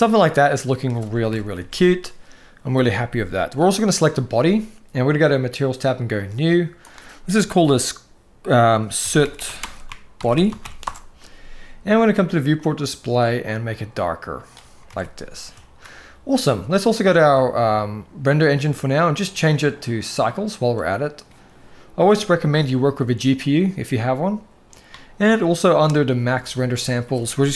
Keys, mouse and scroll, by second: 1.0 KP_1, 1.3 alt+a, 2.7-3.2 shift+middle drag, 3.7 click, 5.9-6.2 drag, 6.7-10.6 drag, 9.1 o, 12.3 click, 14.6 alt+a, 18.1 click, 19.2-20.1 drag, 22.3-23.3 drag, 26.4-27.5 drag.